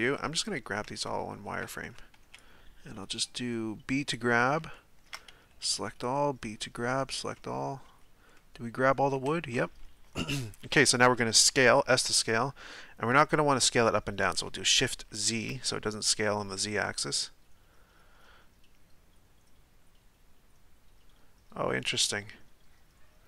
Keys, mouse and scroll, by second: 0.0-1.6 scroll up 1, 1.6 a, 1.8 a, 4.1 b, 4.7-6.8 shift+middle drag, 6.8 b, 7.4 middle click, 8.0 z, 8.4-11.9 middle drag, 11.9 s.